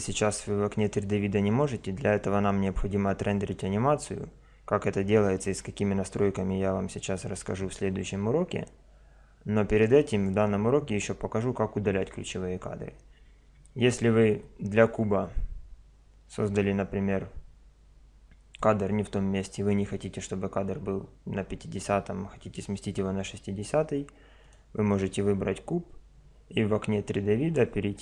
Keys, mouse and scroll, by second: 14.4-16.2 drag, 16.3 middle click, 24.4 right click.